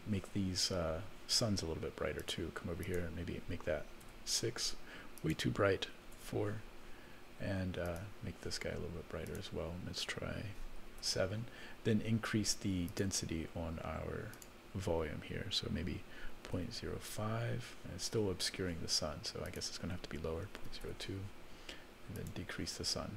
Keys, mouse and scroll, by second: 2.2 click, 2.8-4.2 drag, 5.2-6.3 drag, 7.8 click, 9.2-11.1 drag, 12.9 click, 14.3-17.5 drag, 19.4-20.9 drag, 22.1 click.